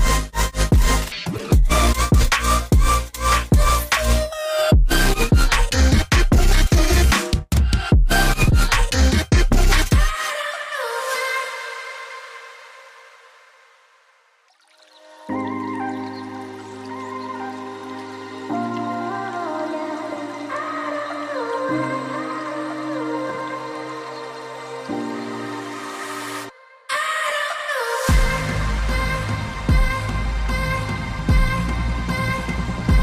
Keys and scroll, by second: 0.6 ctrl+j, 0.9 ctrl+j, 15.6 p, 18.0 a, 18.7 v, 22.3 ctrl+z, 23.3 ctrl+shift+], 25.7 alt+Tab.